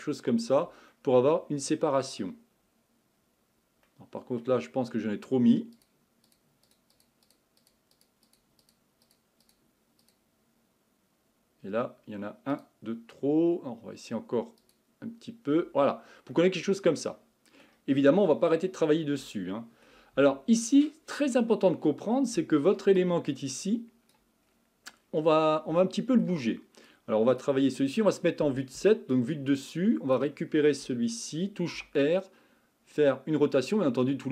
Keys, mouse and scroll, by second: 0.9-2.5 middle drag, 2.5-3.3 scroll up 3, 3.3-3.9 scroll down 1, 3.9-5.7 middle drag, 5.7-16.0 drag, 16.0-16.3 scroll down 2, 16.3-18.0 middle drag, 18.0-18.8 scroll up 3, 18.8-19.3 scroll down 1, 19.3-20.1 shift+middle drag, 20.1 Tab, 20.8 middle click, 21.6-22.8 scroll up 4, 23.0-24.5 drag, 24.5-24.9 scroll down 3, 24.9-25.8 scroll up 9, 25.8-26.9 shift+middle drag, 26.9-28.6 drag, 28.6 KP_7, 29.6-31.7 drag, 31.7 r.